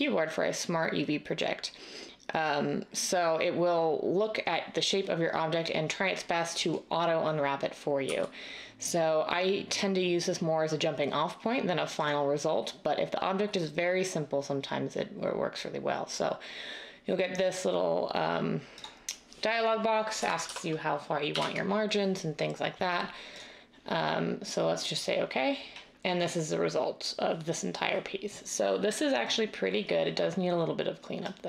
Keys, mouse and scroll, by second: 8.0 u, 20.1-21.3 typing, 24.9 typing.